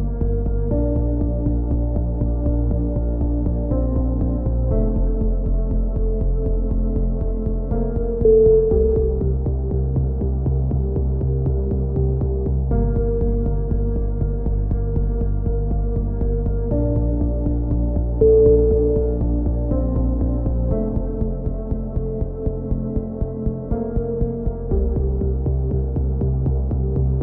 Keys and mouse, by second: 1.7-3.0 drag, 2.3 c, 3.3-4.3 drag, 4.1 c, 4.8-6.1 drag, 8.9 a, 9.2 click, 10.0 middle click, 10.5-11.8 drag, 11.8 g, 14.6-15.9 drag, 15.0 a, 15.8 c, 16.6 right click, 17.0 click, 18.2 click, 19.6 a, 20.4 c, 21.2-22.5 drag, 23.2 a, 23.3 z, 23.6 middle click, 24.1 z, 24.5-26.9 drag, 26.6 alt+m.